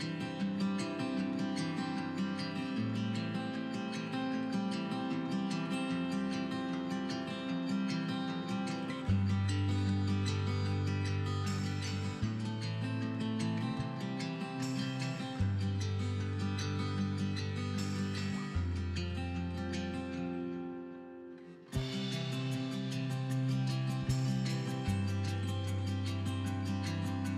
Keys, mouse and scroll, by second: 0.1-0.7 scroll down 3, 0.7-1.4 scroll up 1, 1.4-3.1 middle drag, 2.0 KP_1, 2.5-3.1 scroll up 2, 3.1 click, 3.6 g, 4.4 click, 4.5 scroll down 1, 4.8 click, 4.9 middle click, 5.0 scroll down 1, 5.3 shift+middle click, 5.6 scroll up 1, 5.8 scroll down 1, 5.9 shift+middle click, 6.0-6.3 scroll up 1, 6.6 shift+click, 7.6-8.8 middle drag, 7.8 scroll down 2, 8.4-8.8 scroll up 2, 8.8 shift+click, 9.0-12.6 middle drag, 9.3 scroll up 2, 10.1-10.5 scroll up 2, 10.5 shift+click, 11.2-11.7 scroll down 4, 11.7-12.2 scroll up 2, 12.2 ctrl+p, 12.6 click, 13.2 g, 13.7 right click, 13.8 scroll down 2, 13.9-15.6 middle drag, 14.0-14.7 scroll up 2, 14.7 alt+h, 14.9 scroll down 2, 15.2 scroll up 2, 15.6-16.5 drag, 16.5 scroll down 2, 16.6-19.1 middle drag, 17.0 KP_1, 17.2-17.9 scroll up 4, 17.9 g, 19.1 click, 19.2-20.1 middle drag, 20.1 scroll down 2, 20.2-20.6 middle drag, 20.6 scroll down 2, 20.7 middle click, 21.0-22.2 scroll up 4, 21.2 KP_1, 22.2 g, 23.1 middle click, 23.1 click, 23.2-24.0 scroll down 6, 23.3-25.2 middle drag, 24.9 scroll down 2, 25.2 click, 25.3 scroll up 2, 25.4 scroll down 2, 25.5-26.9 middle drag, 25.9 ctrl+s, 26.0 scroll up 2, 26.3 scroll down 2, 26.9 click.